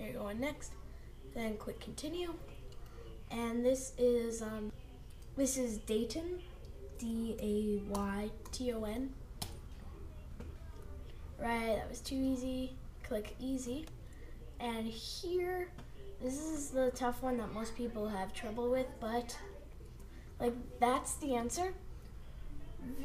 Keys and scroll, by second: 9.4 Return, 19.9 super+v.